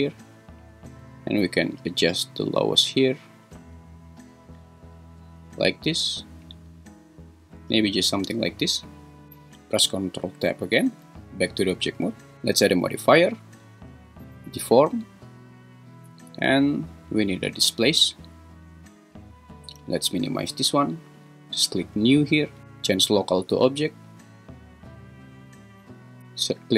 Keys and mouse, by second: 1.9-7.5 drag, 10.2 ctrl+Tab, 13.0-18.2 drag, 20.5-21.0 drag, 22.0-23.1 drag.